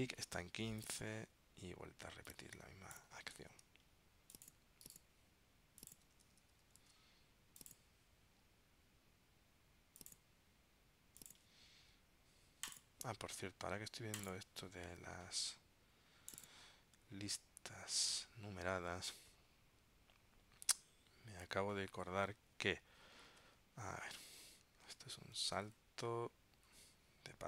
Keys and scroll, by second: 3.5 super+x, 6.9 super+v, 25.0 super+Tab.